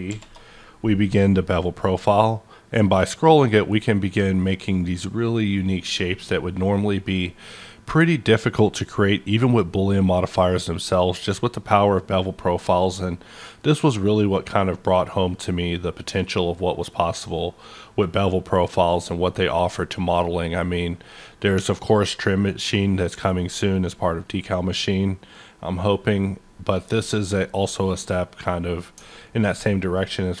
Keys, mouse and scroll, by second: 0.1 shift+p, 2.2-3.0 scroll up 1, 3.0-3.6 scroll up 2, 3.6-4.2 scroll up 1, 4.2-4.8 scroll up 1, 4.8-5.2 scroll up 1, 5.7-6.3 scroll up 1, 8.9 scroll up 1, 11.0-11.7 scroll up 1, 11.7-12.3 scroll up 1, 12.3-13.0 scroll up 1, 13.0-13.8 scroll up 1, 13.8-14.7 scroll up 1, 15.7 scroll up 1, 16.3-16.6 scroll up 1, 17.3 scroll up 1, 19.6 scroll up 1, 20.2 scroll up 1, 21.2-21.6 scroll up 1, 23.3-23.8 scroll up 2, 24.2 scroll up 1, 29.0-30.4 scroll up 1.